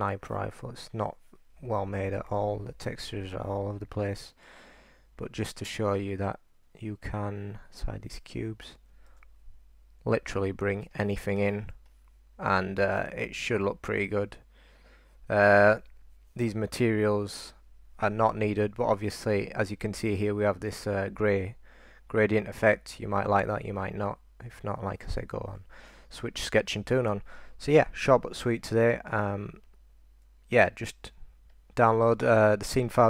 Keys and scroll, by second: 2.4 e, 9.2 super+r, 10.8-12.6 typing, 14.7 typing, 17.4 super+r, 28.5-32.8 typing.